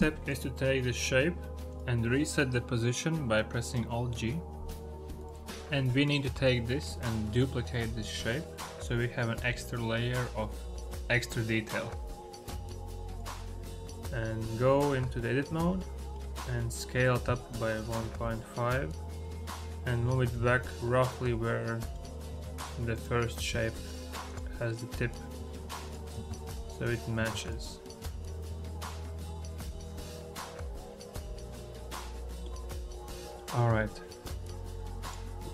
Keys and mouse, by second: 1.5 click, 5.4 alt+g, 5.8 click, 6.4-7.0 shift+drag, 10.5 shift+d, 13.4-14.7 middle drag, 14.9 Tab, 15.3 a, 15.6 middle click, 16.4 click, 17.1-18.5 typing, 17.5 ctrl+z, 18.7 click, 19.8 g, 20.2 y, 21.7 click, 22.2 Tab, 23.3 Tab, 24.1 click, 25.2 Tab, 25.8 click, 26.0 Tab, 27.1 Tab, 27.9 Tab, 28.3 Tab, 28.8 click, 29.7 Tab, 30.1 Tab, 31.1 Tab, 31.1 1, 31.1 ., 31.1 2, 31.8 shift+click, 33.0 middle click, 33.4 middle click.